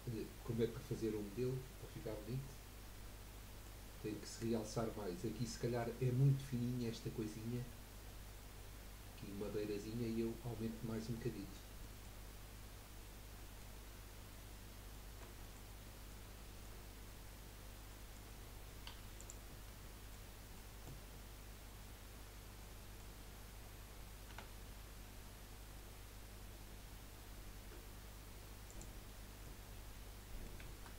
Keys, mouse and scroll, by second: 0.4-0.7 scroll down 3, 0.9-3.8 middle drag, 11.1-16.3 middle drag, 16.3 shift+scroll down 1, 16.4-17.5 shift+middle drag, 17.5-17.9 scroll down 1, 17.9-18.9 middle drag, 18.9 3, 19.2 click, 19.8 scroll down 1, 19.9-21.2 middle drag, 21.2-22.6 scroll up 1, 22.6-24.3 middle drag, 24.3 e, 29.0 middle click, 29.6-30.1 scroll up 2, 30.1-30.9 middle drag.